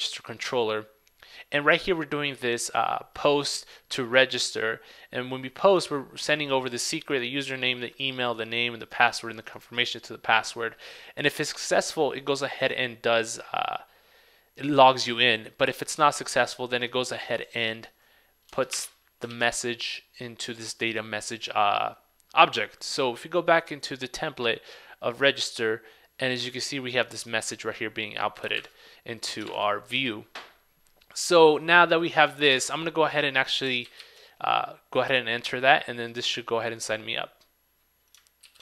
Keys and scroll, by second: 19.4 super+s, 28.7 super+Tab, 33.9 super+a, 34.2 super+v.